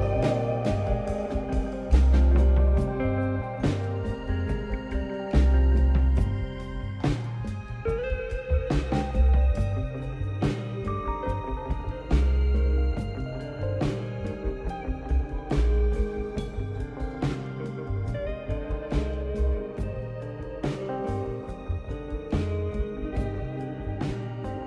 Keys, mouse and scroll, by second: 0.0 click, 1.4 r, 5.4 s, 6.8 click, 7.4 click, 8.5-10.6 scroll up 1, 10.6 click, 11.6 click, 13.0 s, 14.4-15.1 drag, 15.1-15.6 scroll up 2, 15.6 s, 16.9 click, 19.0 click, 22.1 KP_7, 22.6-23.2 scroll down 1, 23.6 drag.